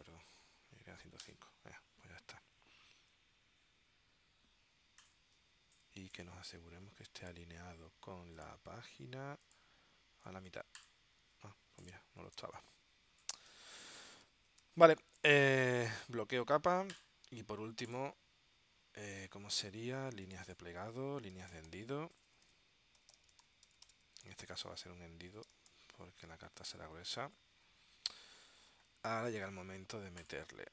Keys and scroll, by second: 0.0-1.1 typing, 1.4 Return, 5.3 space, 12.5 space, 14.7 space, 21.4-26.3 typing, 27.3 Return, 29.0 space.